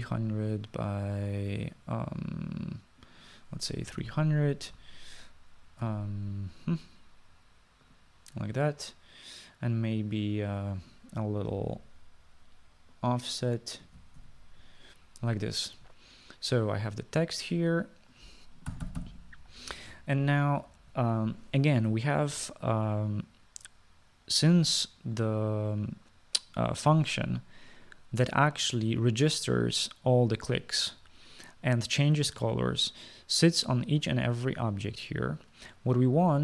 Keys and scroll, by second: 0.3-1.4 typing, 4.8-5.1 typing, 12.3-13.0 typing, 14.9-15.3 typing, 19.6-20.6 typing.